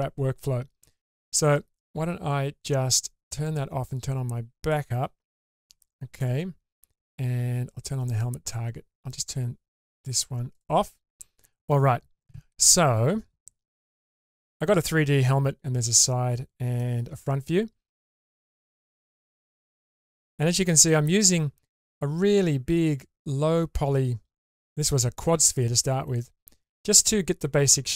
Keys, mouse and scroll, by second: 3.4 click, 4.6 click, 5.4-6.2 middle drag, 8.1 click, 10.5 click, 14.0 alt+z, 17.2-18.8 middle drag, 19.9-20.8 middle drag.